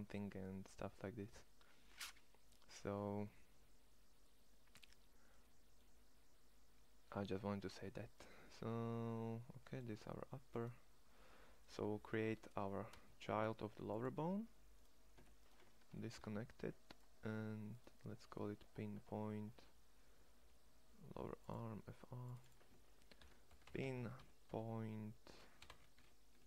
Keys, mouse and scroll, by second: 10.2 click, 12.3 e, 15.9 alt+p.